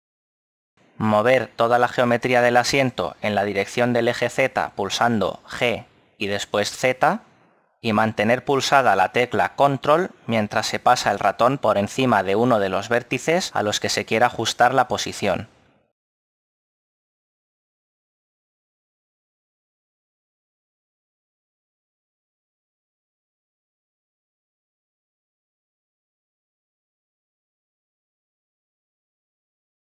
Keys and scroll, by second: 7.2 g, 7.6 z, 20.1 a, 21.5 Tab, 27.8 Tab.